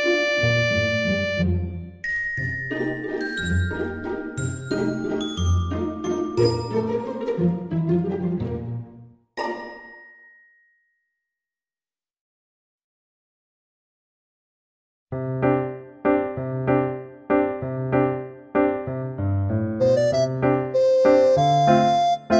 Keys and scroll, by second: 0.0-0.6 typing, 1.9 ctrl+z, 2.1 ctrl+z, 2.7 ctrl+z, 3.3 Tab, 3.8 Return, 4.3 Tab, 4.6 Tab, 4.9 Return, 8.1 Tab, 18.8 Tab.